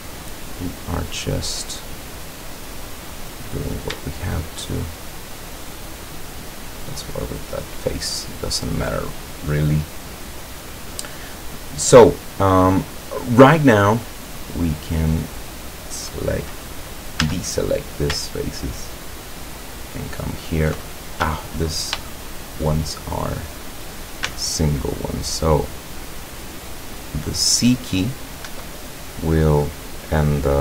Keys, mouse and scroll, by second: 3.7 right click, 4.3 shift+right click, 5.1-7.1 drag, 8.3 scroll up 1, 8.9 scroll down 1, 9.4-11.1 drag, 12.5-12.8 scroll up 1, 13.9 click, 14.6 click, 15.6 click, 17.2 a, 17.6 scroll up 1, 19.6 alt+shift+right click, 21.2 shift+a, 22.1-22.9 shift+middle drag, 24.3 c, 25.3-27.7 drag, 28.5 Escape.